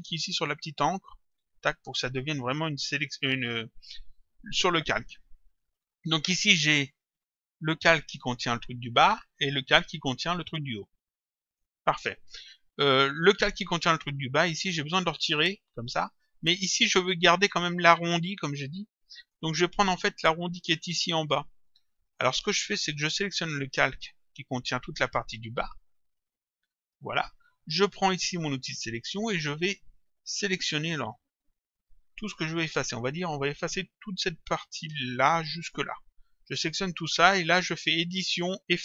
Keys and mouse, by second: 1.2 click, 7.2 click, 9.0 click, 11.5 click, 15.0 click, 19.2 click, 23.2 click, 26.0 click, 28.6 click, 30.8 click, 38.2 click.